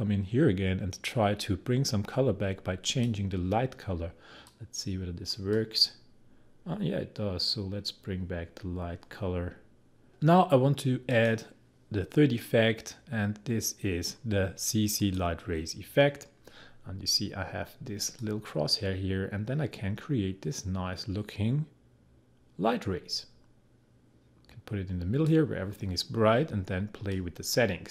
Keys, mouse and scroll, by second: 2.9-11.1 drag, 15.1 click, 18.2-27.9 drag.